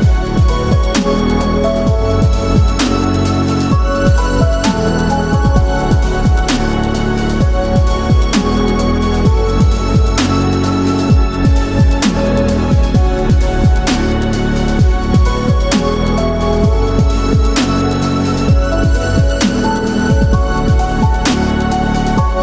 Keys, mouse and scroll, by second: 0.9 click, 2.0-3.9 right drag, 7.8 click, 9.1-10.1 middle drag, 10.9 Tab, 11.8 click, 12.3 alt+click, 17.0 right click, 17.8 s, 19.5 click, 20.2 KP_1, 21.7 e, 22.3 z.